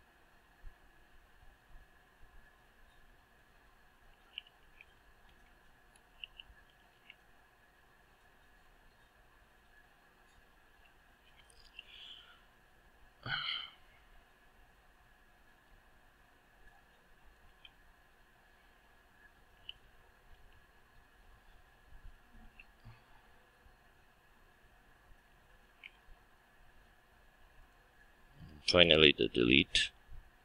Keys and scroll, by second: 5.3 Return, 11.3 Return, 18.6 Return, 22.4 ctrl+shift+Return.